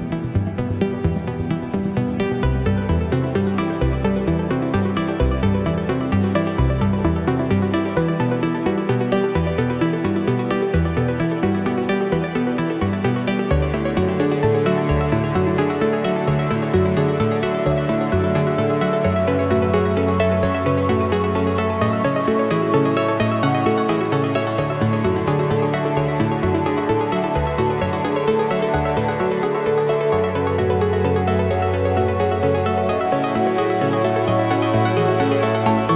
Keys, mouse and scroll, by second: 1.0 click, 1.8-2.2 scroll down 2, 3.0 click, 4.2 click, 5.4 8, 5.7 0, 6.5 click, 7.6 8, 8.0 0, 9.8 click, 10.7 2, 11.1 0, 12.4 click, 13.4 8, 13.7 0, 14.5-14.9 scroll down 2, 15.3 click, 16.4 click, 18.4 click, 20.0 click, 20.7 click, 21.2-22.3 typing, 23.3 click, 24.2 8, 24.5 0, 25.2 click, 26.7 click, 28.4 click, 29.0 click, 30.0 click, 30.7 click, 31.6 click, 32.2 click, 32.7 scroll down 2, 33.6-35.5 drag.